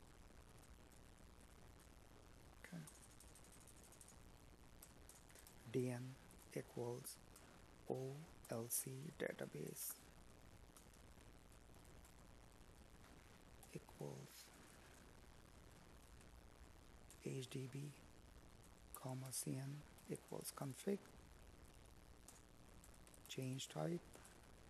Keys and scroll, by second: 16.0 Tab, 19.4 space, 21.4 Tab, 23.4 space.